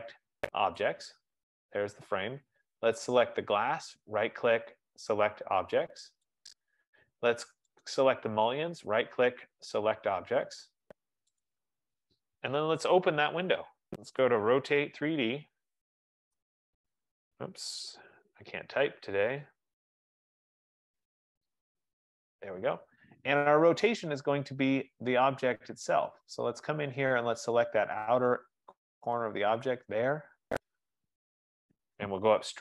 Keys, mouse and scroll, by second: 1.0 click, 4.1 right click, 6.8 click, 8.0 right click, 11.8 click, 13.4 middle click, 13.7-14.4 scroll, 15.5-17.0 typing, 18.2-22.3 typing, 25.4 Return, 25.4-25.9 scroll, 26.3 scroll, 27.1 scroll, 27.6-28.2 scroll, 28.2 scroll, 29.2 scroll, 29.8 click, 30.4-30.9 scroll, 30.9-31.4 scroll, 31.5-32.4 scroll.